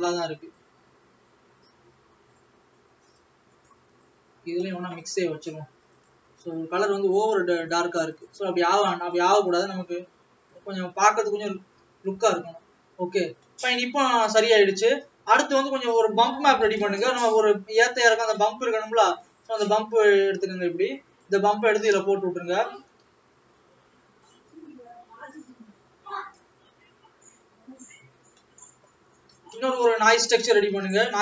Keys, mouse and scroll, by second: 0.6 click.